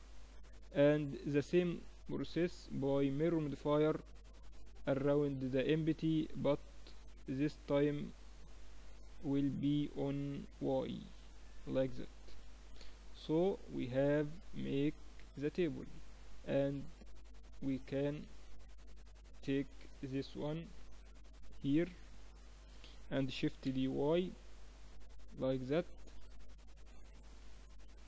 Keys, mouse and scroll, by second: 5.1-6.9 drag, 7.4-11.2 drag, 11.2-12.5 middle drag, 16.3-18.2 middle drag, 18.8 KP_3, 20.1-21.9 drag, 23.2 shift+d, 26.1 click, 26.7-28.0 middle drag.